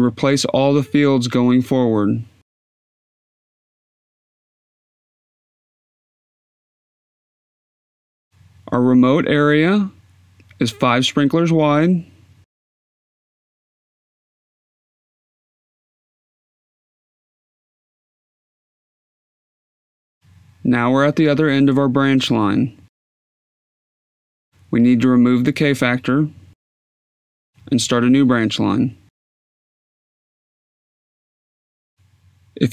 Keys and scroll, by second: 6.4 e, 8.8 e, 12.1 s, 12.7 2, 13.6 Down, 14.2-17.1 typing, 15.4 Down, 16.4 Down, 22.1 b, 22.4 1, 23.3 Tab, 24.9 0, 25.9 Tab, 27.4 2, 29.2 Tab, 29.7-32.7 typing, 31.9 Down.